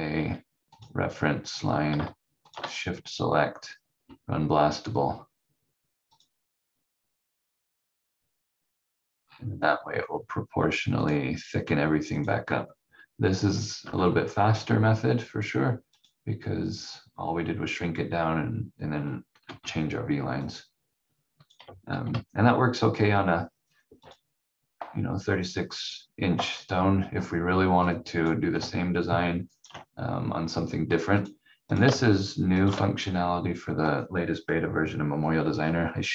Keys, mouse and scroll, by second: 2.4 shift+click, 6.1 click, 9.2 scroll down 1, 11.0 click, 13.8 F4, 14.7-15.2 scroll up 1, 15.9 click, 19.4 F4, 20.4 click, 21.9 shift+F2, 24.0 click, 25.1-25.5 scroll down 1, 27.8 click, 29.5 ctrl+right click, 30.1 scroll up 1, 31.2 click, 32.5 shift+click.